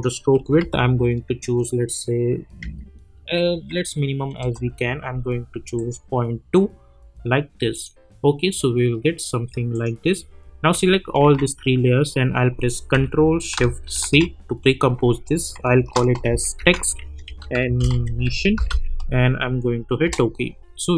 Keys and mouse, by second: 4.3 Return, 5.7 click, 11.2 ctrl+a, 14.0 ctrl+shift+c, 15.5-19.2 typing, 20.0 Return.